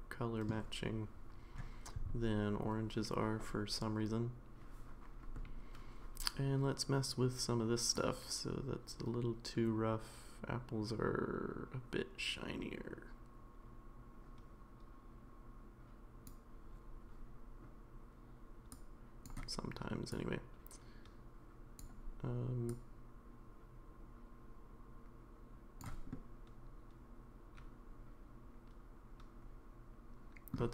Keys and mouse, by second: 7.9-16.2 drag, 18.9-21.7 drag, 22.8-25.9 drag, 26.1-30.5 middle drag.